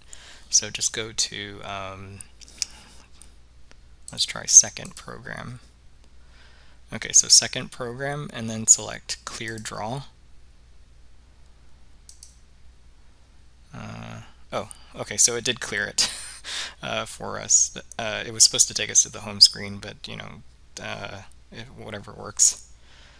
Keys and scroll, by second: 9.6 Return, 12.2 Return.